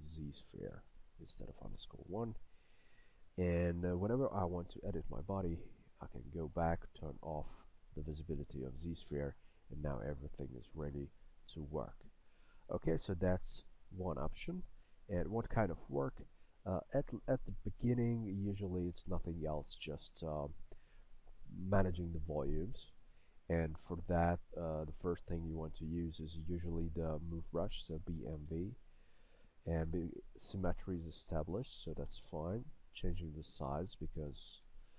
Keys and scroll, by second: 1.8 Return, 27.7-29.0 typing, 31.8 s.